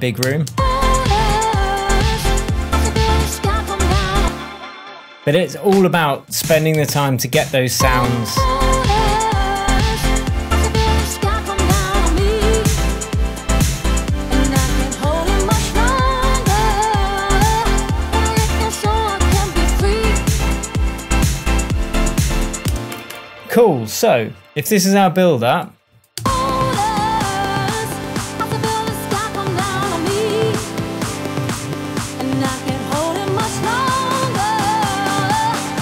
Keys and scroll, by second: 4.1 space, 6.2 Up, 7.1 Down, 7.7 space, 22.6 space, 26.1 space.